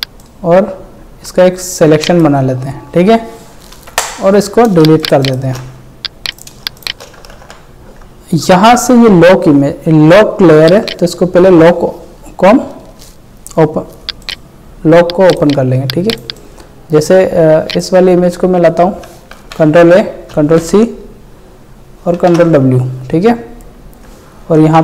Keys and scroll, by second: 3.9 ctrl+Delete, 4.8 ctrl+space, 5.6 ctrl+alt+space, 7.0 ctrl+space, 7.4 ctrl+alt+z, 17.4 space, 19.3 ctrl+a, 20.3 ctrl+c, 22.2 ctrl+w, 24.6 ctrl+v.